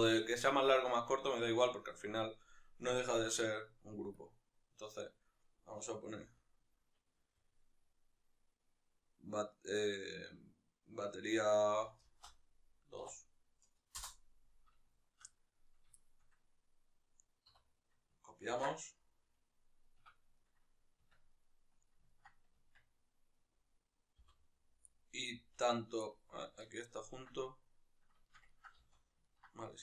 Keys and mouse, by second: 1.0 z, 15.4 right drag, 15.7-21.1 shift+middle drag, 20.9 Tab, 21.1 right click, 21.8-23.1 ctrl+middle drag, 22.6 Tab, 23.1 right click, 23.9-29.8 middle drag, 23.9 l, 25.1 l, 28.6 z.